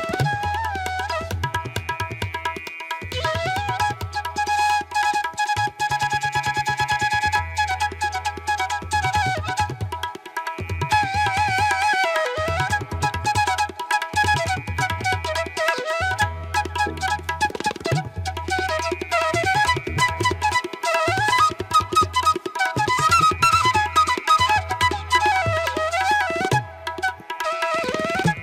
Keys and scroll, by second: 0.1 space, 0.5 ctrl+=, 13.6 ctrl+-, 15.7 space, 17.5 ], 18.9 space, 23.0 ctrl+=, 23.3 ctrl+alt+z, 23.6 ctrl+alt+z, 28.3 ctrl+-.